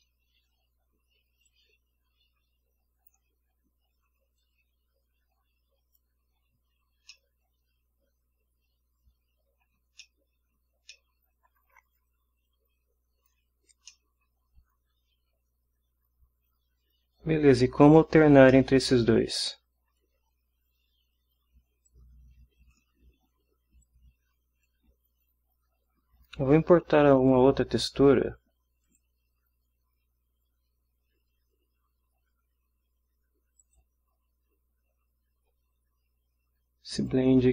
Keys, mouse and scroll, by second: 1.4-3.3 drag, 4.4-6.2 drag, 7.1-9.8 middle drag, 9.9 ctrl+scroll down 2, 10.4 ctrl+middle click, 10.8 ctrl+scroll down 2, 10.9 ctrl+middle click, 12.4 click, 13.6 scroll up 1, 13.8 scroll down 2, 13.9 middle click, 14.2 scroll up 1, 14.8 scroll up 2, 18.5-19.0 middle drag, 19.0 scroll down 1, 21.8-22.9 drag, 23.8-24.8 drag, 26.1-26.6 scroll down 1, 26.8 scroll up 2, 27.3 click, 28.8 click, 33.6 click, 37.0 click.